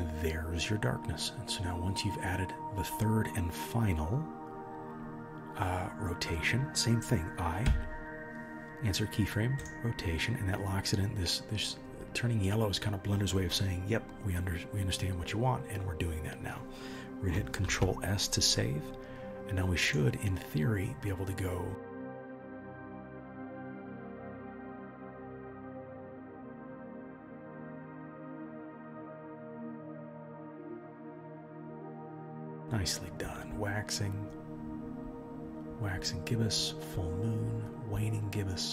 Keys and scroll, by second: 8.7 i, 17.6 ctrl+s.